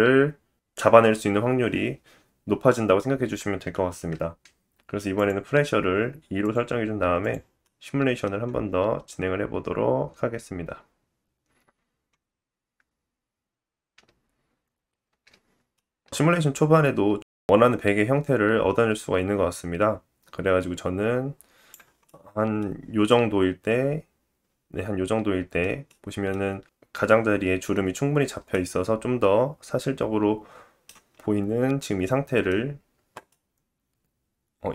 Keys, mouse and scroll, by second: 5.2-6.3 drag, 7.1 click, 8.0 middle click, 15.0 space, 16.2-21.9 drag, 16.2-21.9 middle drag, 16.2-21.9 right drag, 21.9-22.6 scroll up 3, 22.6 scroll down 2, 23.0 middle click, 25.8 middle click, 30.0 middle click, 32.6-33.0 scroll up 2, 33.2 middle click.